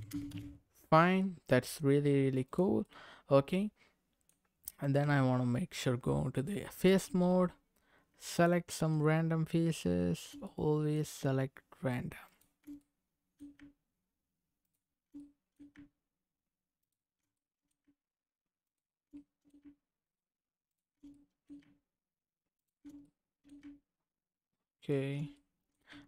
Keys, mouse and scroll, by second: 1.2 middle click, 2.4 click, 2.8-4.3 middle drag, 4.8 click, 5.0 Tab, 8.3 alt+click, 10.4 middle click, 12.3 alt+shift+click, 12.8 middle click, 14.6 alt+shift+click, 15.2 middle click, 16.8 alt+shift+click, 17.3 middle click, 18.6 alt+shift+click, 19.1 middle click, 20.7 alt+shift+click, 21.1 middle click, 22.6 alt+shift+click, 23.0 middle click, 24.8 alt+shift+click, 25.3 middle click.